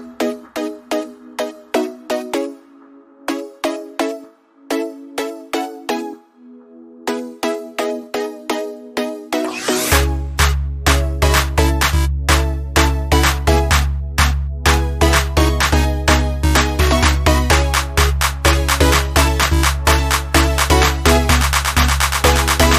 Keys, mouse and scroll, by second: 1.0 scroll up 1, 2.6-6.1 alt+drag, 6.1 alt+scroll down 1, 6.9 scroll down 1, 8.4 ctrl+d, 9.7 scroll down 1, 10.1 scroll up 1, 11.6 click, 13.7 click, 17.6 right click, 18.7-22.7 drag.